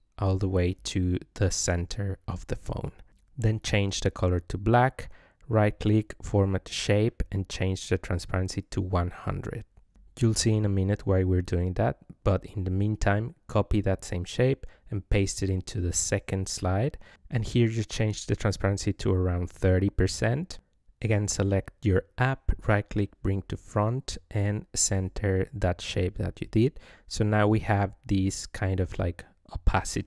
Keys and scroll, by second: 10.7 ctrl+c, 13.6 ctrl+v.